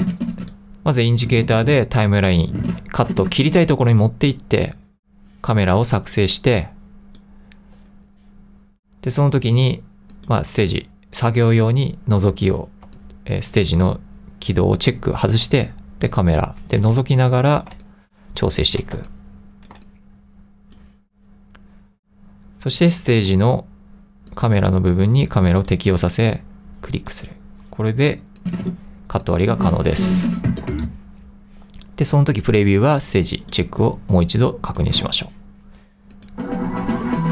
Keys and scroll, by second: 12.9 3, 13.9 2, 17.0 3, 17.8 2, 19.1 |, 19.9 3.